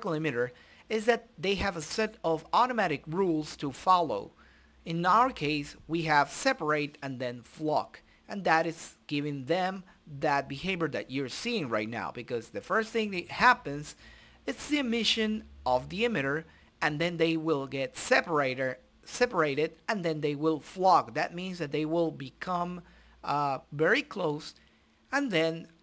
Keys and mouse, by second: 0.6 click, 2.5 middle click, 3.1-4.1 drag, 5.0 click, 5.8 right click, 6.7 middle click, 7.5 right click, 7.7 middle click, 8.1-9.5 drag, 10.9 click, 12.6 click, 13.6 click, 14.9-22.1 drag, 23.3 click, 25.2-25.8 drag.